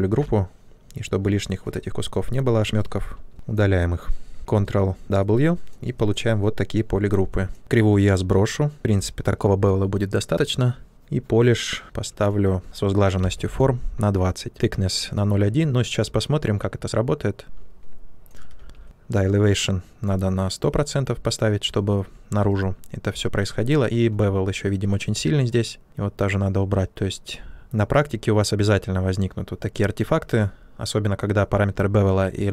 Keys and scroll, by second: 4.3 shift+f, 4.4 ctrl+w, 12.9-13.8 typing, 18.5 ctrl+z, 24.7 ctrl+z.